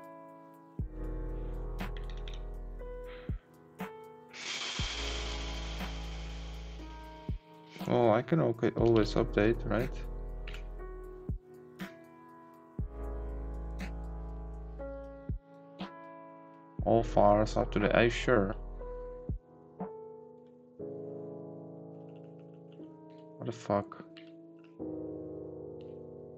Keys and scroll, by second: 0.9 Up, 5.0 Down, 6.0 Up, 7.5 Down, 9.1 ctrl+shift+a, 10.5 ctrl+t, 21.9 Up, 22.7 Left, 24.5 Down, 25.8 Right.